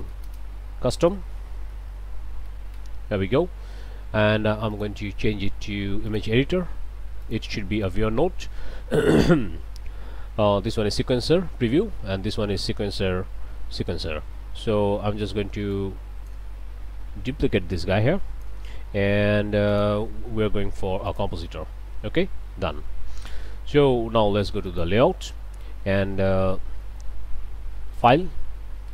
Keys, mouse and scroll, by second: 0.0-2.5 typing, 2.8 Return, 4.8 click, 6.1 click, 7.2 click, 7.8 click, 15.7 click, 17.3-18.6 drag, 19.7 click, 21.1 click, 24.7 click, 25.3-26.7 drag, 26.8 shift+click, 27.9 click.